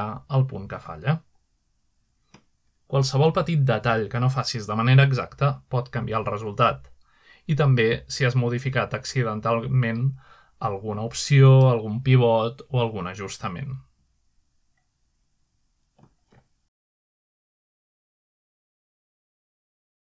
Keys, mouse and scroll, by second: 0.7-1.7 middle drag, 1.5-2.2 typing, 2.8-3.9 alt+middle drag, 4.2-8.4 middle drag, 7.8 typing, 10.0 middle click, 13.2 middle click, 13.4 typing, 14.1 click, 15.1 click, 15.6-16.7 middle drag, 15.9-16.4 typing, 18.4-20.0 middle drag.